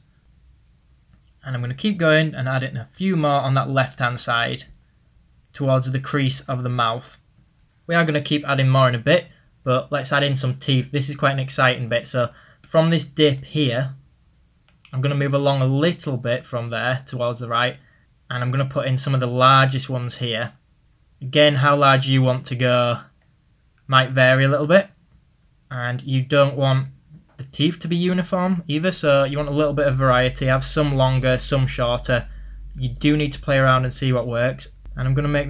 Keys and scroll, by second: 14.8 ctrl+z, 32.5 ctrl+z.